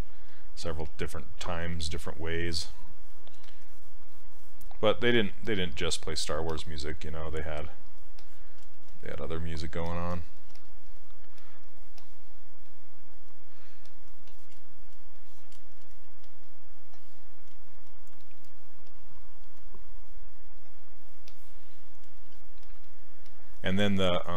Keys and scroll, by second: 10.5 s.